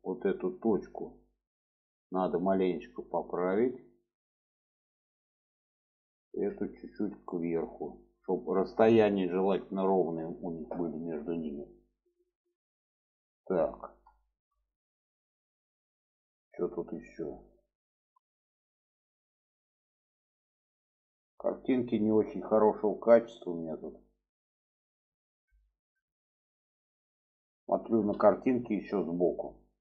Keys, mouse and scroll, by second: 0.5 click, 2.1 click, 3.1-4.7 drag, 5.0 click, 6.3 click, 6.9-8.5 drag, 9.2 shift+middle click, 11.4 middle click, 12.5-13.9 middle drag, 14.2 shift+middle click.